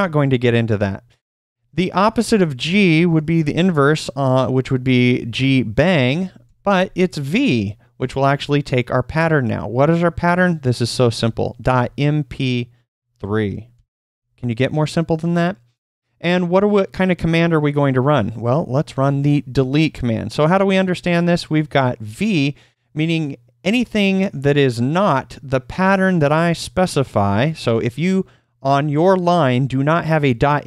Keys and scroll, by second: 2.0 typing, 3.0 shift+1, 7.9 /, 11.8 typing, 12.9-14.2 typing, 19.5 d.